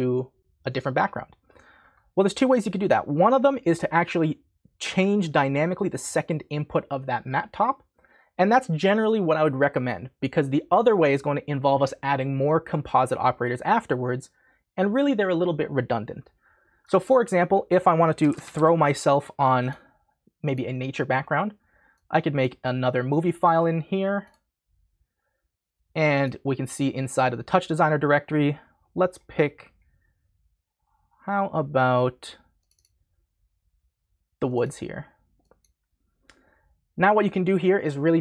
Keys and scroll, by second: 18.0-19.0 typing.